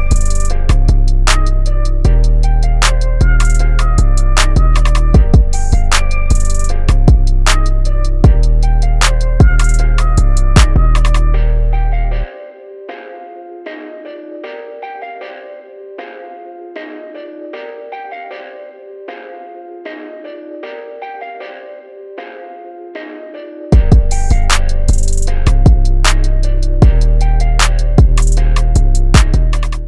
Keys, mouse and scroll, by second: 0.8 click, 2.2 click, 3.1 ctrl+space, 3.4 ctrl+click, 3.7 ctrl+space, 4.8 click, 6.6 click, 7.7 Tab, 8.1 Up, 10.8 click, 13.2 Up, 15.1 click, 15.5 Up, 18.9 click, 19.8 typing.